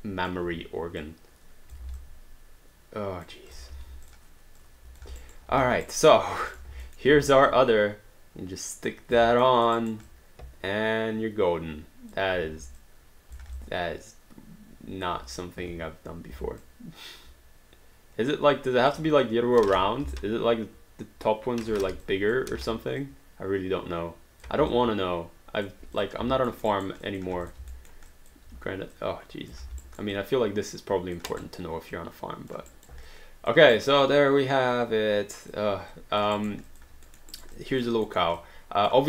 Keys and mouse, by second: 1.0 click, 1.7 alt+click, 3.5 click, 3.7 r, 4.1 click, 5.2 alt+right click, 5.5 alt+d, 5.8 alt+right click, 6.5 click, 7.0 alt+middle click, 7.1 w, 7.5 click, 9.1 alt+click, 9.5 alt+middle click, 9.8 alt+right click, 10.1 alt+click, 12.6 w, 12.8 click, 13.3 alt+click, 13.4 alt+d, 13.6 alt+click, 15.4 click, 15.6 e, 16.7 alt+click, 20.1 j, 20.1 click, 22.0 alt+click, 22.5 w, 23.0 click, 24.7 alt+d, 24.7 alt+click, 26.0 click, 26.5 alt+middle click, 26.8 alt+right click, 27.0 alt+click, 27.4 click, 27.7 alt+middle click, 28.3 alt+click, 29.0 click, 29.6 alt+d, 29.8 alt+right click, 30.2 alt+click, 31.3 alt+right click, 32.0 alt+click, 32.7 alt+right click, 33.2 alt+click, 33.7 alt+right click, 34.0 alt+click, 36.0 alt+click, 36.4 alt+right click, 36.7 alt+click, 37.2 alt+middle click, 37.3 alt+right click, 37.6 alt+click, 38.1 alt+middle click, 38.4 alt+click.